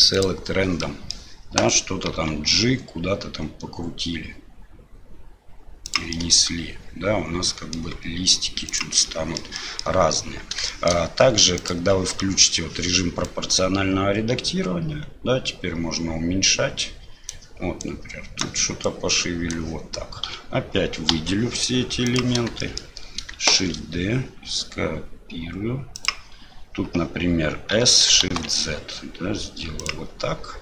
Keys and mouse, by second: 0.8 middle click, 6.3-7.8 middle drag, 9.1 middle click, 9.6 ctrl+middle click, 10.7 shift+middle click, 11.6 click, 12.3 middle click, 13.2-14.9 drag, 14.9-17.3 right drag, 17.8 click, 18.8 click, 20.2 a, 21.1 KP_1, 22.1 click, 22.6 shift+click, 23.5 shift+d.